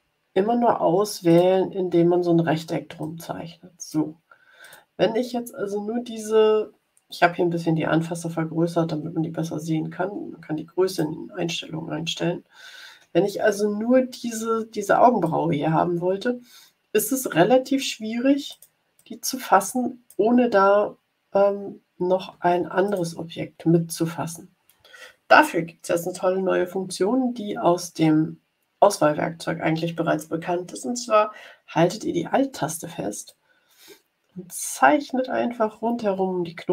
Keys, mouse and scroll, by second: 0.0 scroll down 1, 1.2 click, 2.9-4.0 drag, 4.6 click, 9.4 ctrl+scroll up 2, 10.8 click, 11.7 ctrl+scroll up 2, 12.3-12.6 ctrl+scroll up 2, 15.3-17.9 drag, 18.4 click, 18.9-20.3 drag, 22.8 click, 33.2-36.7 alt+drag.